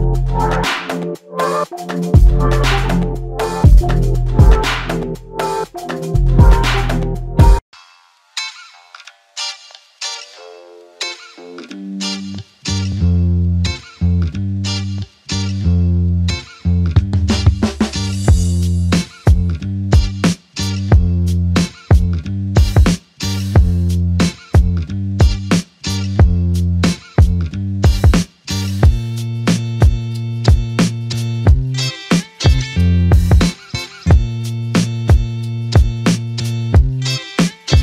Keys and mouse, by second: 0.2 alt+shift+click, 2.6 double click, 5.3 f, 6.4 alt+click, 9.4 double click, 12.7 typing, 13.9 alt+click, 15.2 double click, 18.8 alt+click, 20.9 double click, 23.3 alt+click, 24.7 double click, 27.0 alt+click, 28.1 double click, 30.2 alt+click, 33.5 double click, 34.0 alt+click, 35.1 double click, 37.5 alt+click.